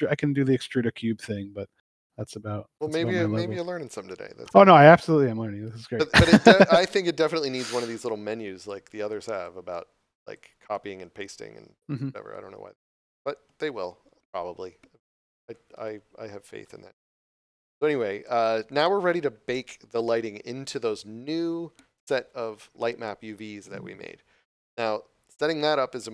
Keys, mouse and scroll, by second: 7.9 click.